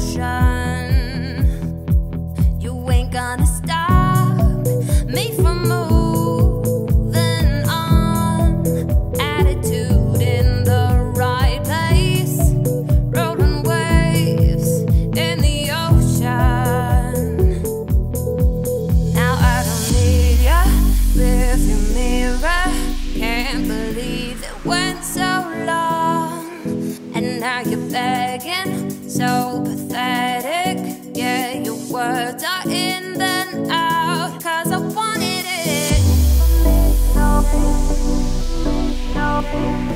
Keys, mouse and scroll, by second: 1.1-2.2 shift+drag, 2.2-3.1 scroll down 2, 3.1 s, 6.8-7.1 scroll down 2, 7.1-9.3 middle drag, 9.3-9.8 scroll up 1, 9.8 `, 10.2 `, 10.9-11.5 scroll up 3, 11.5 s, 16.5 Tab, 16.8 scroll down 2, 17.0-17.5 middle drag, 17.5 ctrl+s, 18.1 q, 19.8 click, 20.3-21.4 scroll down 4, 21.4-24.5 shift+drag, 25.1 scroll down 1, 25.2-25.8 middle drag, 25.8 `, 26.3-28.0 scroll up 4, 28.0-31.1 shift+drag, 32.2-32.5 scroll up 1, 32.5-33.9 shift+middle drag, 33.9-35.5 shift+drag, 35.8 scroll down 2, 36.0-37.3 ctrl+middle drag, 37.3 `, 38.1 ctrl+s, 38.5-38.8 scroll down 3, 38.8 shift+middle drag, 39.1-39.6 scroll up 2, 39.6 click.